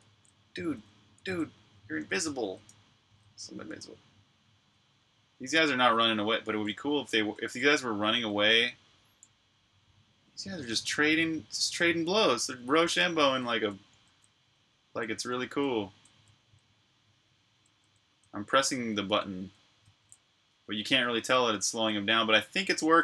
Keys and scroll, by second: 0.0-3.6 typing, 5.7-7.9 typing, 10.2 h, 12.5-21.5 typing, 22.6 typing.